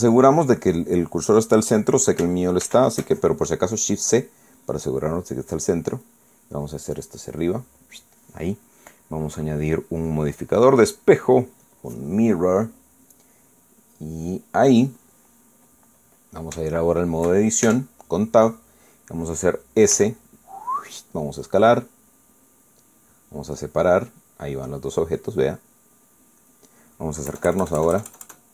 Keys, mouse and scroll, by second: 3.6 shift+c, 7.0-9.1 drag, 10.4 click, 11.1 click, 12.6 click, 17.0-18.3 middle drag, 18.6 shift+Tab, 19.5 middle click, 20.9 s, 23.9 click, 24.7-27.2 drag, 27.3 middle click, 28.3 KP_Add.